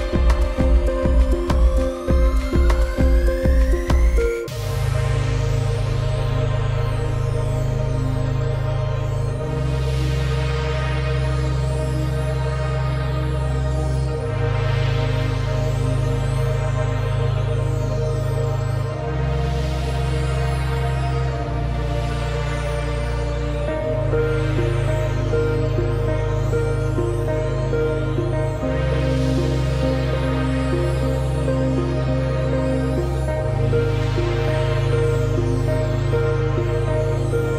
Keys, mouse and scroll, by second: 4.1 z, 5.7 click, 10.5 click, 12.1 scroll down 1, 12.3 space, 12.4 click, 12.6 space, 13.3 click, 15.1 click, 15.6 click, 19.4 v, 19.8 alt+scroll down 2, 20.6 click, 21.5 x, 21.6 click, 22.9 scroll down 1, 23.1 click, 25.0 click, 26.5-26.9 scroll up 1, 27.2 click, 33.7 click, 35.7 ,, 36.2 alt+click, 36.8 ctrl+z, 37.4 click.